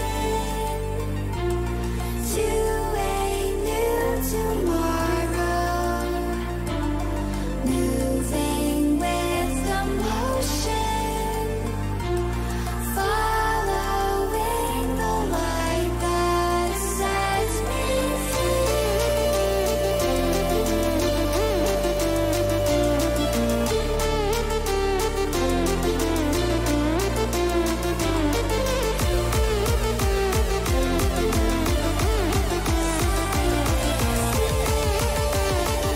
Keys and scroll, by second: 0.1 ctrl+t, 7.2 Return, 31.6 ctrl+-.